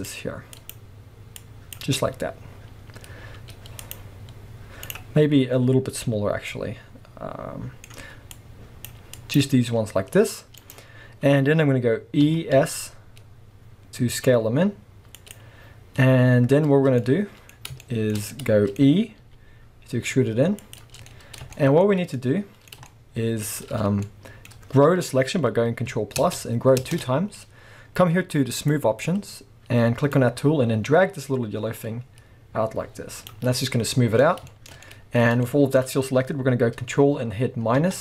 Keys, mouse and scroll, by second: 4.9 right click, 5.3 scroll down 1, 5.6-6.0 scroll up 1, 6.0 c, 10.7 right click, 10.9-12.2 scroll up 1, 12.2 e, 15.3 click, 17.0-18.8 middle drag, 18.8-19.2 scroll up 2, 19.2 e, 20.8 click, 21.0 scroll down 2, 21.2-28.6 shift+middle drag, 21.9 scroll up 2, 26.2 ctrl+KP_Add, 28.6-30.4 drag, 33.4 scroll down 2, 33.6-38.0 middle drag, 34.2 scroll up 2, 35.2 scroll up 2, 37.8 ctrl+KP_Subtract.